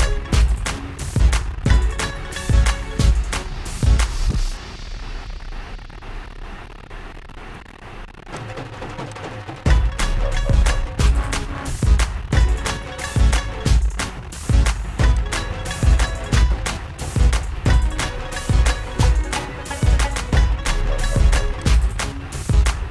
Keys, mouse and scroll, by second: 1.3 click, 7.7 click, 8.9 click, 10.5 click, 11.8 click, 15.7 click, 16.9 click, 18.9 click, 22.3 click.